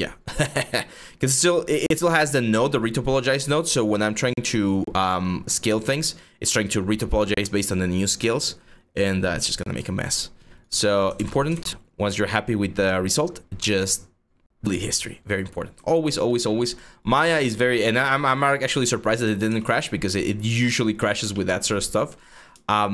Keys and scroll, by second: 10.8 ctrl+z, 11.2 ctrl+z, 19.1 w, 22.2 r.